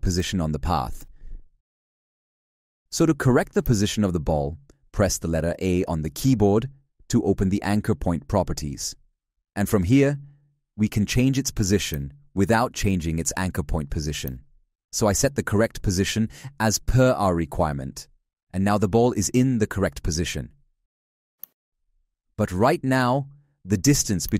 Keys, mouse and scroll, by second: 12.1 ctrl+z, 13.2 z, 14.2 ctrl+click, 21.8 shift+/.